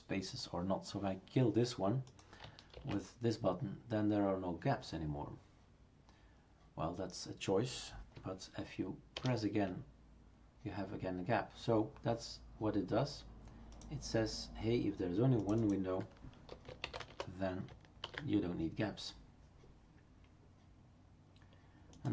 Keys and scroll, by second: 2.7 shift+super+q, 9.1 super+Return, 16.2-17.5 typing, 18.0 ctrl+s.